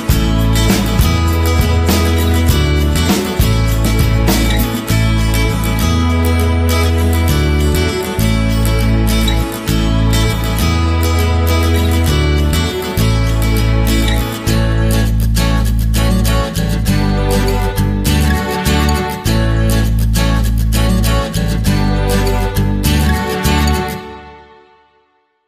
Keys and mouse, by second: 0.7-1.1 middle drag, 1.1 KP_3, 1.6 shift+middle click, 2.3 Tab, 3.1 alt+right click, 4.0 alt+right click, 4.7 s, 6.4 alt+right click, 6.9 s, 8.1 alt+right click, 10.4 Tab, 11.2-12.0 middle drag, 12.7 Tab, 12.9 middle click, 14.0 s, 15.4 alt+right click, 15.7 middle click, 16.3 s, 17.2 g, 17.9 KP_3, 18.6 shift+middle click, 19.0 Tab, 19.6 Tab, 20.0 right click, 20.9 ctrl+l, 22.3 shift+d, 23.6 r, 24.7 KP_1.